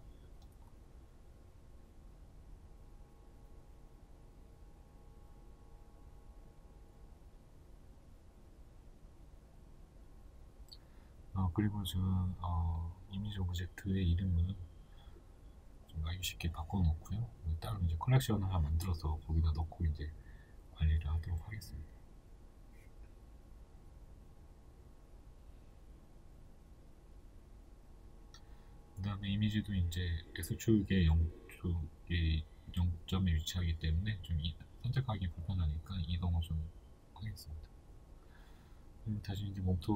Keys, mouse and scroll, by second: 0.8 click, 10.6 click, 10.7 Return, 16.7-17.8 drag, 20.5-21.6 right drag, 21.6 click, 23.8 shift+click, 26.5-31.5 shift+middle drag, 27.8 KP_1, 29.0-29.8 scroll up 2, 29.8-30.2 scroll down 2, 30.2-31.5 scroll up 2, 31.5 click, 32.2-35.1 shift+middle drag, 32.5-33.3 scroll down 2, 33.3 g, 35.1 click, 35.5-36.9 shift+middle drag, 35.8-36.3 scroll up 2, 36.9 right click, 37.6-39.9 shift+middle drag.